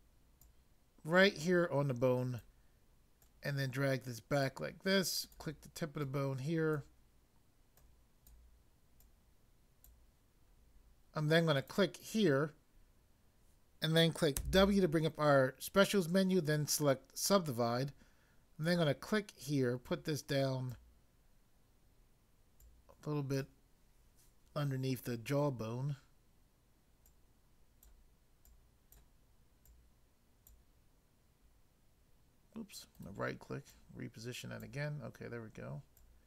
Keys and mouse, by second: 0.5 click, 3.2 click, 5.2 click, 5.9 click, 7.7 click, 9.0 click, 11.6 click, 14.4 w, 16.5 click, 18.7 click, 19.9 click, 22.6 click, 27.0 click, 28.4 click, 29.6 click, 33.0 right click, 33.6 click, 35.9 click.